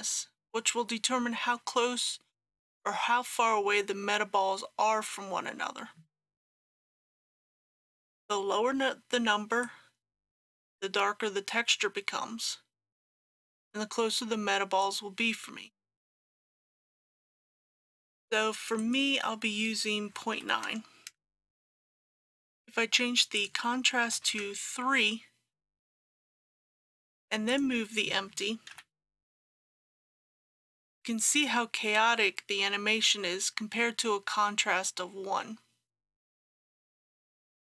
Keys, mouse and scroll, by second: 20.1 KP_Decimal, 20.4 KP_9, 23.4 click, 24.1 KP_3, 27.5 click, 28.7 g, 36.8 click, 37.2-37.6 scroll down 1.